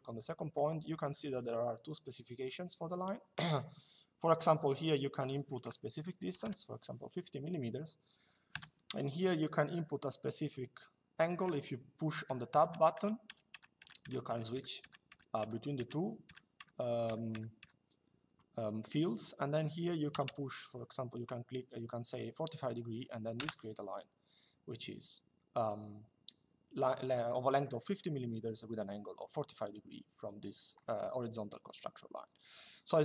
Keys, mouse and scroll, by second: 6.0 shift+5, 8.2 Tab, 12.0 Tab, 19.9 4, 23.1 Return.